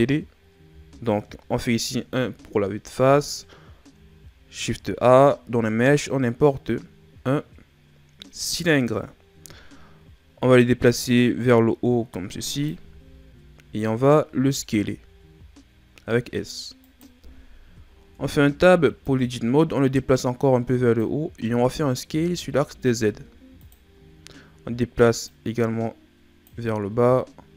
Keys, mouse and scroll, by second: 0.6 KP_1, 1.9 shift+scroll up 4, 4.6 shift+a, 10.8 click, 12.9-14.1 shift+scroll up 4, 14.2 s, 18.1 Tab, 19.0 click, 22.0 s, 24.0 scroll up 1, 25.2 click, 27.1-27.5 scroll up 1.